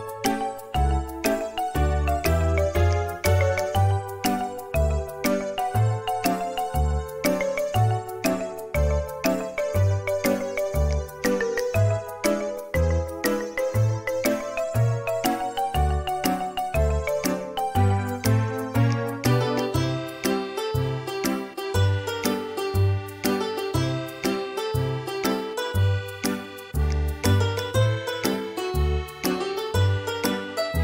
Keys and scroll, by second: 6.6 space, 7.6 m, 22.3 space, 25.2 space, 28.3 space.